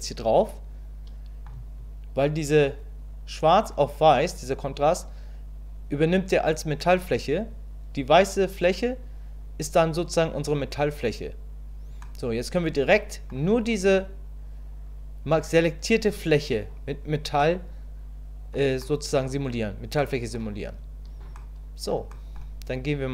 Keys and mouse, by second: 12.0-13.3 middle drag, 17.4-18.5 middle drag, 18.9 middle click, 20.0 middle click, 21.4 middle click, 22.1 middle click.